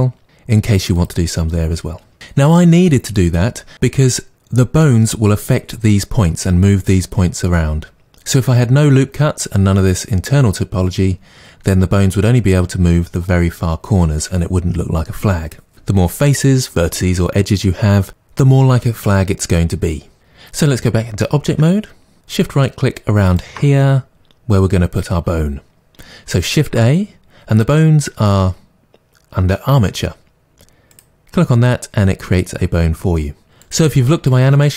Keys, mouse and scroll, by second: 1.0 click, 21.5 Tab, 23.3 shift+right click, 26.6 shift+a, 33.6 click.